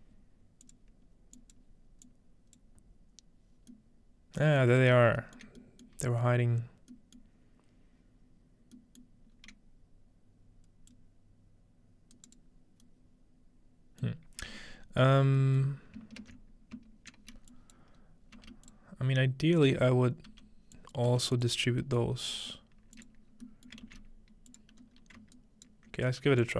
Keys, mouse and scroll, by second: 1.1-2.6 scroll up 1, 3.7-5.6 middle drag, 6.1 shift+middle click, 7.1-9.4 middle drag, 9.4-10.4 scroll up 2, 10.9-12.4 drag, 12.2 right click, 14.1-15.4 middle drag, 15.7-16.8 middle drag, 16.8 typing, 17.2 scroll down 2, 17.5 click, 18.0 scroll up 3, 18.1-20.5 typing, 18.7-20.6 drag, 18.8-20.3 scroll up 1, 20.7-22.1 drag, 21.6-22.1 scroll down 1, 22.1-22.6 scroll up 3, 22.6 middle click, 23.7 shift+middle click, 23.9 shift+d, 24.5 click, 24.8-26.5 scroll up 2, 25.4 typing, 25.9 alt+click, 25.9-26.5 alt+right drag.